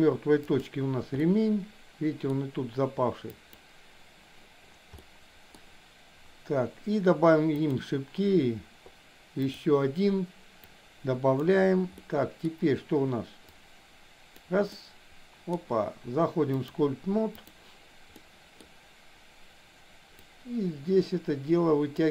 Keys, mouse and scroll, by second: 0.5 click, 1.2-2.4 middle drag, 3.3 click, 5.0 middle click, 7.5 click, 9.4 click, 10.8 click, 11.9 middle click, 13.5-14.4 drag, 14.7 middle click, 16.7 click, 18.2 middle click, 20.3-21.9 drag, 22.0-22.1 middle drag.